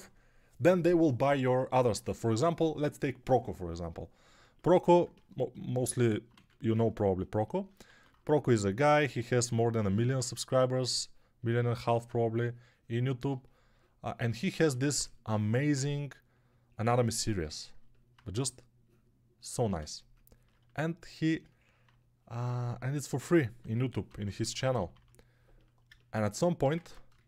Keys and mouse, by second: 6.2 1, 7.8 alt+q, 10.1 2, 14.2-19.6 alt+drag, 14.2-19.6 alt+middle drag, 14.2-19.6 alt+right drag, 14.6 1, 23.5-24.9 typing, 26.7 ctrl+Tab, 27.0 shift+a.